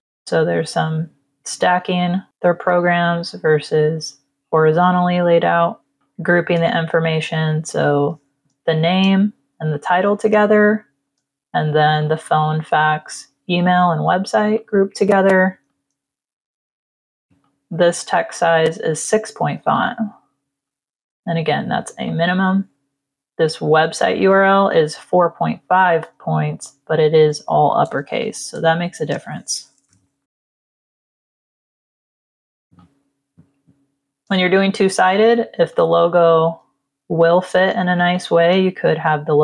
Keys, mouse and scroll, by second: 5.9 click, 6.4 click, 7.6 click, 8.4 space, 8.5 click, 9.6 click, 10.2 space, 10.3 click, 11.9 click, 14.4 click, 15.2 z, 15.6 click, 16.7 t, 17.3 click, 19.7 click, 20.5 click, 21.9 click, 27.5 ctrl+click, 28.1 v, 28.5 space, 28.6 click, 29.8 ctrl+-, 30.1 click, 31.1 click, 35.6 click, 37.0 v, 37.9 space, 38.0 click.